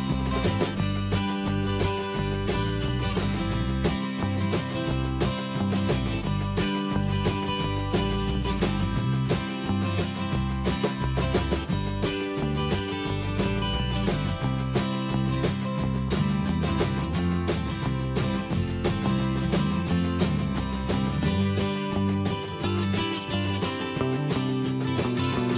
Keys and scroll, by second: 5.7 Escape, 6.2 alt+BackSpace, 18.4 ctrl+z, 19.9 ctrl+d.